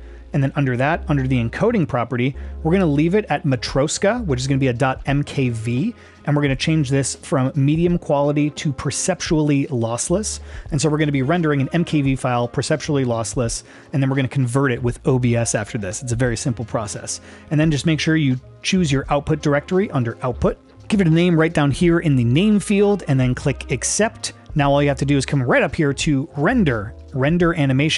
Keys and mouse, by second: 1.6 click, 7.7-9.9 drag, 19.9 click, 26.4-27.9 drag.